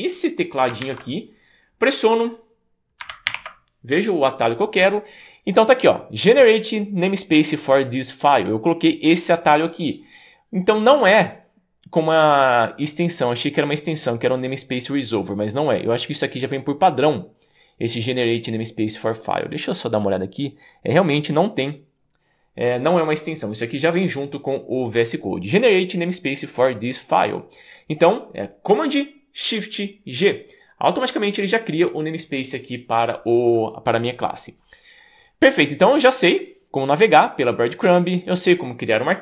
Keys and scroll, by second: 3.3 shift+super+g.